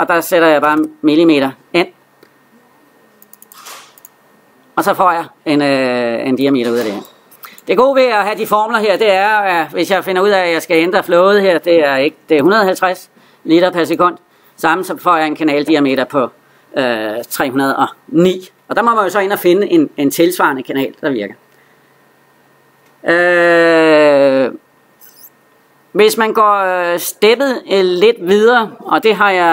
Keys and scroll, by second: 11.8 Left.